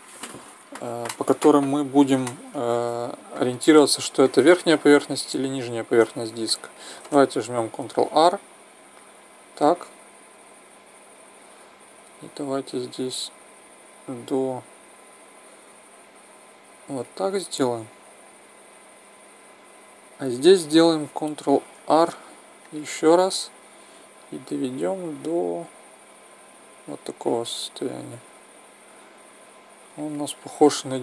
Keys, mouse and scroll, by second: 4.4 middle click, 5.3-6.5 middle drag, 7.8 ctrl+r, 8.1 middle click, 16.9-18.8 drag, 21.7 ctrl+r, 30.9-31.0 middle drag.